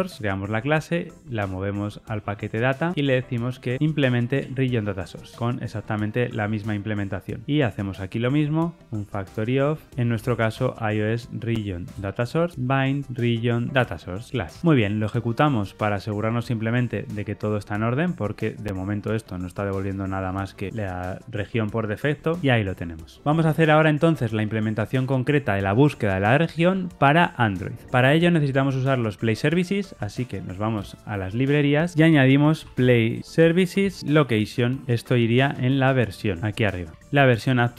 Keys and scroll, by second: 2.8 alt+Return, 4.3 Tab, 12.2 Return, 12.5 Escape, 13.7 Return, 17.4 ctrl+r, 17.4 shift+F10, 19.0 super+b, 34.8 super+x, 36.9 Tab.